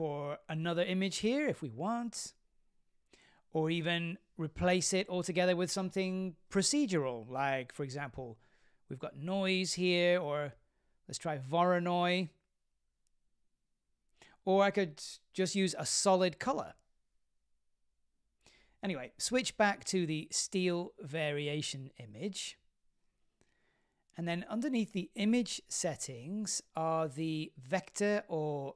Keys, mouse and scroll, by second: 14.0-17.1 drag, 17.8 click, 20.6-22.1 drag, 25.9 click.